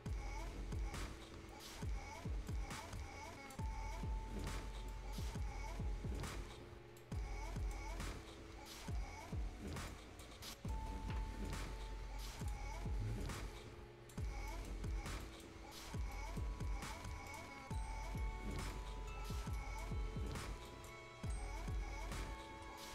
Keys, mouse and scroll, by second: 2.5 scroll up 1, 2.7-6.5 drag, 6.5 scroll down 1, 7.0 right click, 7.9 scroll up 1, 9.5 scroll down 1, 9.7 scroll up 1, 9.9 click, 10.4 scroll down 1, 10.5 right click, 12.4 click, 14.5 right click, 15.0 scroll down 1, 15.2 right click, 15.6-16.1 scroll up 1, 16.1 right click, 17.3 click, 17.8 scroll up 1, 18.7 click, 19.9 scroll down 1, 20.2-20.5 scroll up 1, 20.7 click, 21.3 scroll down 1, 21.5-21.9 scroll up 1.